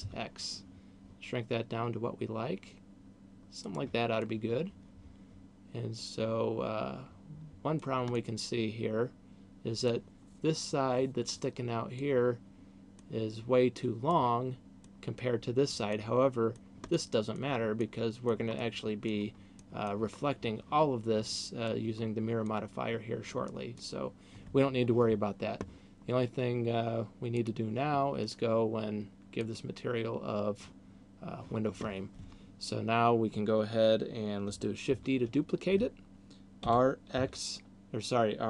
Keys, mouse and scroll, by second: 3.8 click, 4.0 middle click, 8.3 middle click, 12.0 middle click, 14.0 middle click, 15.8 middle click, 16.8 middle click, 17.8 middle click, 18.5 middle click, 19.5 middle click, 21.5 middle click, 22.5 middle click, 27.3 click, 35.0 shift+d.